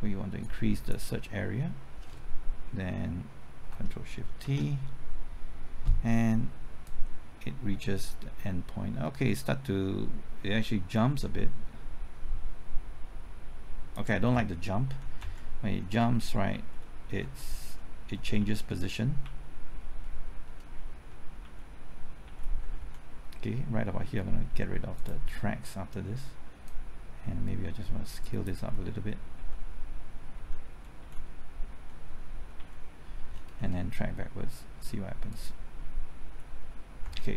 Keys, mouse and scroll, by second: 0.4 click, 4.8 ctrl+shift+t, 6.9-14.0 drag, 14.8-16.5 typing, 17.2 Right, 17.6 Left, 18.2 Right, 18.4 Left, 19.8-20.5 scroll up 1, 20.5-20.9 scroll down 1, 20.9 Right, 20.9-21.9 typing, 22.3 Left, 22.6 Right, 25.0-29.0 drag, 29.4 Right, 30.4-31.7 typing, 32.4 Left, 33.3-34.1 scroll down 1, 35.3 click, 37.0 Right.